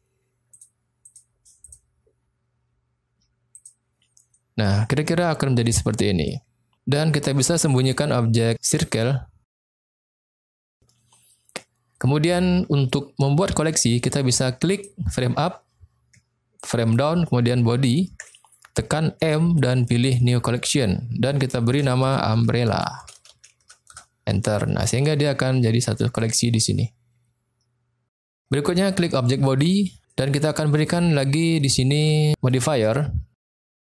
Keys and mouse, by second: 0.5 click, 1.0 click, 1.6-3.7 drag, 4.3 middle click, 5.2-5.5 shift+middle drag, 6.0 middle click, 8.8 click, 12.0-12.8 middle drag, 16.5 ctrl+click, 17.8 ctrl+click, 19.2 m, 23.9 Return, 26.1 click, 28.1-28.9 middle drag, 29.5 click, 30.0-30.8 middle drag, 31.5-32.0 middle drag, 32.4-33.9 middle drag.